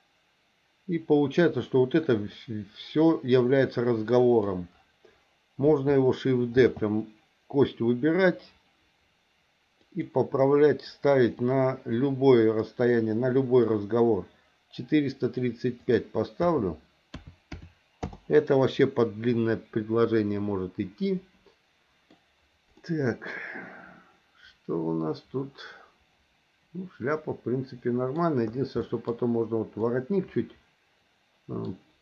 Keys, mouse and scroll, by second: 1.5-4.4 drag, 6.6 shift+d, 11.4-13.7 drag, 15.8-18.1 drag, 18.8-22.1 middle drag, 22.8-28.2 middle drag, 28.8 middle click, 29.8-31.6 middle drag.